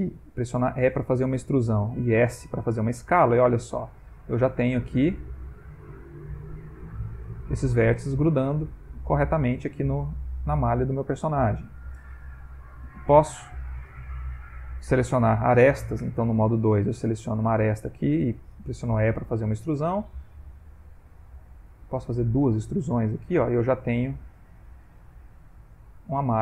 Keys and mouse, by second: 0.0 a, 0.7 e, 1.7 s, 3.1 g, 4.6 middle click, 5.0 middle click, 5.8 g, 7.7 middle click, 9.0 ctrl+middle click, 9.6 click, 9.8 g, 10.8 click, 10.9 g, 12.1 shift+middle click, 12.6 middle click, 14.3 click, 14.8 shift+click, 16.0 2, 16.5 click, 19.0 e, 22.5 e, 23.8 click, 24.1 e.